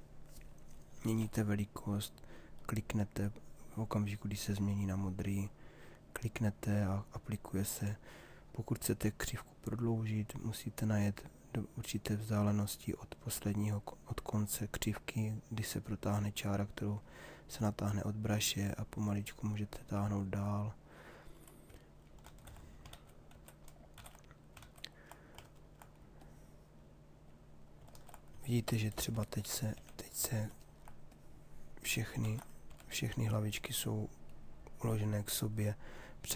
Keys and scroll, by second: 0.8 s, 21.9 ctrl+z, 29.8 s, 32.3 ctrl+z, 32.7 s.